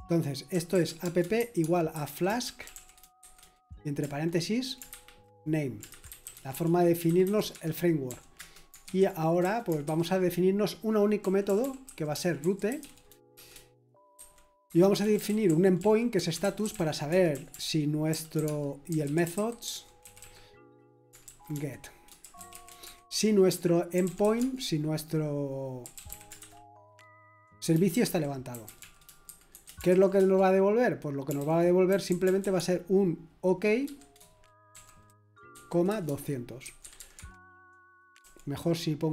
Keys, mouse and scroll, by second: 0.2-3.7 typing, 4.9-9.9 typing, 7.5 Escape, 10.9-39.1 typing.